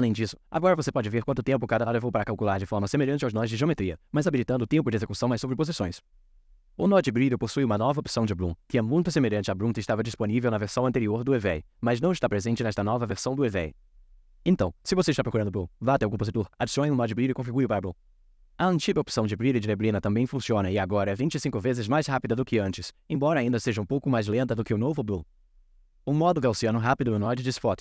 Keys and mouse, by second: 0.7-3.1 drag, 3.7 click, 4.3 Tab, 5.6 middle click, 6.1 middle click, 7.3-8.4 drag, 9.8-11.2 drag, 12.8 click, 13.1-13.8 drag, 16.6-17.3 drag, 18.3-19.5 drag, 20.3-21.7 drag, 22.0-23.3 drag, 24.3 click, 26.9-27.8 drag.